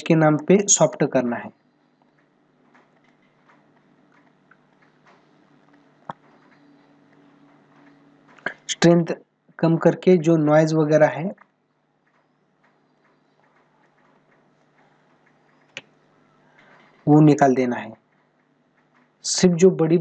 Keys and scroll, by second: 0.1 space, 7.9 ctrl+=.